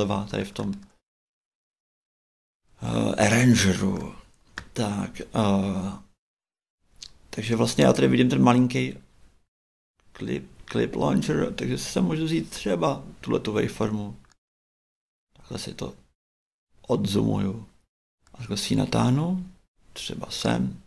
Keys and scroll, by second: 9.4 shift+Right.